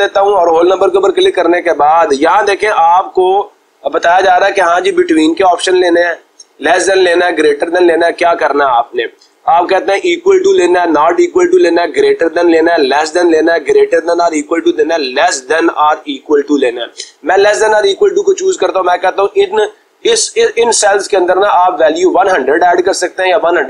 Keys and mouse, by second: 6.9 click, 17.2 click, 19.1 click.